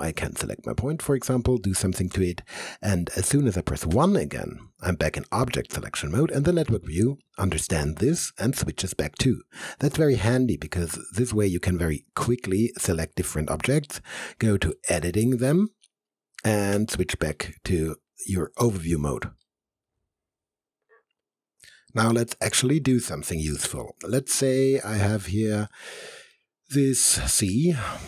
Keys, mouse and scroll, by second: 1.8 click, 4.0 1, 10.0 1, 10.3 alt+right click, 10.9-12.2 alt+middle drag, 12.4 alt+middle click, 12.4 alt+click, 14.1 alt+2, 14.8 alt+right click, 15.7 alt+middle click, 16.8 1, 17.4 alt+right click, 17.9 alt+middle click, 18.3 click, 18.4 alt+click, 19.4-20.8 alt+right drag, 24.0-25.2 alt+drag, 25.2 alt+click, 25.8 alt+middle click, 26.4-27.7 alt+right drag, 27.7 alt+middle click.